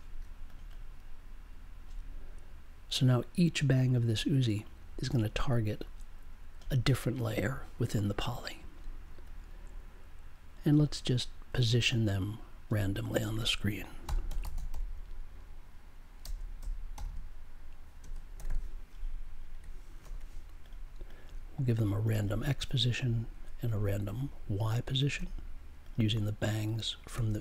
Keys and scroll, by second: 14.0 n, 16.2 BackSpace, 16.9 n, 17.9 space, 18.3 2, 20.0 super+j.